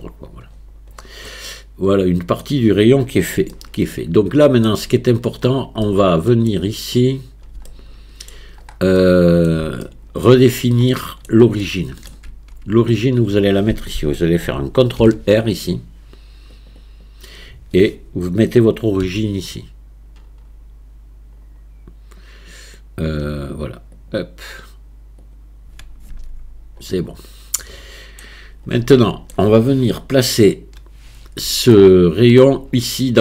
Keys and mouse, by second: 1.5-2.4 middle drag, 3.5-4.7 shift+middle drag, 6.5 middle click, 7.7-8.3 shift+middle drag, 9.0-9.5 middle drag, 9.9-10.3 shift+middle drag, 10.9 click, 10.9 middle click, 11.7-12.1 shift+drag, 12.3 Tab, 15.0 ctrl+r, 19.1 q, 25.2 click, 26.1 Tab, 27.6-28.3 middle drag, 28.9-29.4 shift+middle drag, 30.3 KP_1, 31.8-32.5 shift+middle drag.